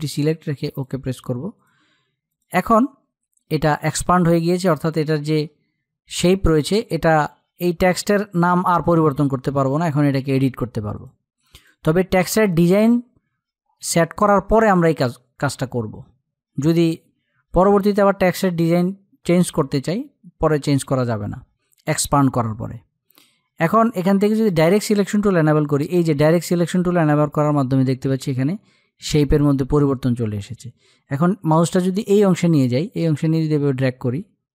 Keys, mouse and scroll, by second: 0.1 click, 10.3 click, 23.9 click, 32.3-34.5 drag.